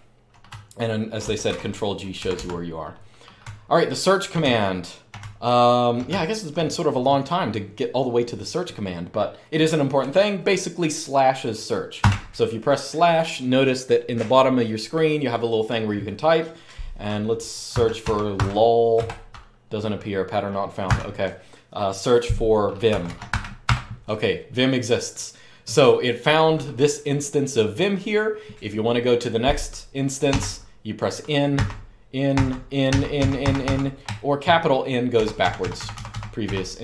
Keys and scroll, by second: 0.0-6.6 typing, 1.2 ctrl+g, 2.0 Escape, 11.7 /, 17.2-18.7 typing, 20.6 typing, 22.6-23.5 typing, 30.0 n, 31.3-33.4 typing, 34.9-36.8 typing.